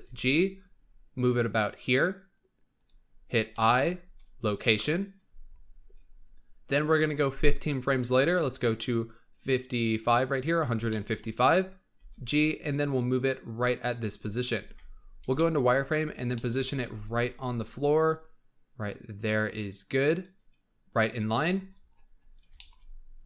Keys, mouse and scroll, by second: 0.0 g, 3.4 i, 8.3-10.3 drag, 10.3-10.8 scroll up 2, 10.8-11.9 shift+middle drag, 11.9 g, 14.0-14.5 scroll up 3, 14.5 z, 14.8 scroll up 4, 15.3-15.6 shift+middle drag, 15.6-16.2 scroll up 9, 16.2 shift+middle drag, 16.5 scroll up 4, 16.8 g, 21.3-22.5 scroll down 21, 22.5 shift+middle click, 22.7 scroll up 2.